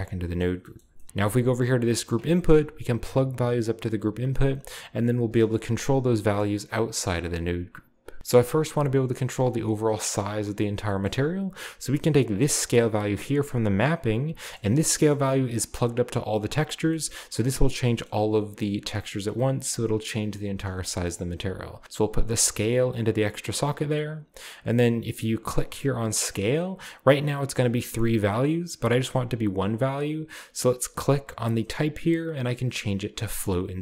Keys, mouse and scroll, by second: 0.4 middle click, 0.8 middle click, 1.0 middle drag, 1.0-2.0 scroll up 1, 2.0 click, 5.3-6.2 middle drag, 5.8 Tab, 6.4-7.3 middle drag, 8.5-10.2 drag, 8.8 g, 10.9 middle click, 11.1 middle drag, 11.3-13.0 scroll up 1, 13.0-14.4 drag, 14.6 middle click, 15.1 middle click, 15.2-16.0 scroll down 1, 16.4-17.7 scroll up 1, 17.1 middle click, 17.7-20.8 scroll down 2, 20.9-21.6 scroll up 1, 21.6 scroll up 1, 21.7-23.0 drag, 23.9 click, 25.5 click, 31.4 click, 33.4 click.